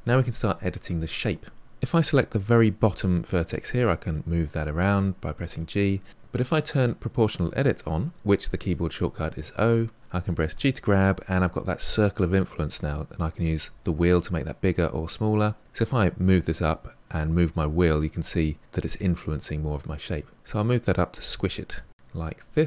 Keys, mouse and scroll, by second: 2.3 click, 4.2 g, 9.5 click, 10.5 g.